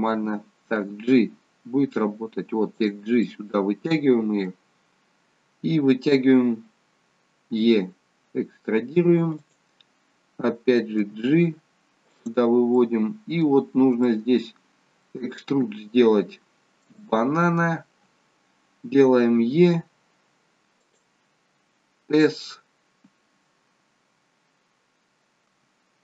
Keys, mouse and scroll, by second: 1.2 g, 3.3 middle click, 4.8-6.2 scroll down 1, 7.5 e, 11.0 g, 12.9 middle click, 13.7-14.1 scroll up 1, 14.1 middle click, 15.4-15.8 scroll down 1, 15.9-16.8 scroll up 1, 17.0 shift+middle click, 17.0 scroll up 1, 19.4 e, 25.5 s.